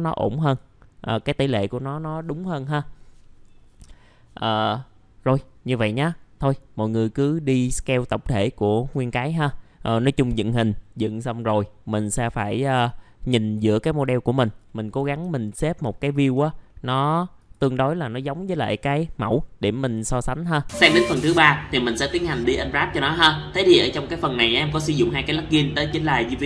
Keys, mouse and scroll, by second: 15.3 alt+middle click, 16.0 alt+middle click, 17.3 click.